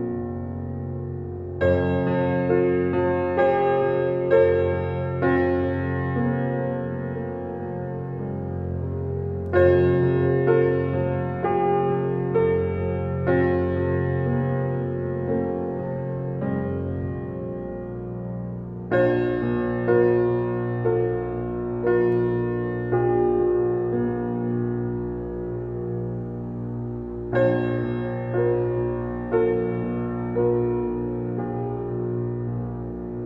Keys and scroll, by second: 28.7 Left.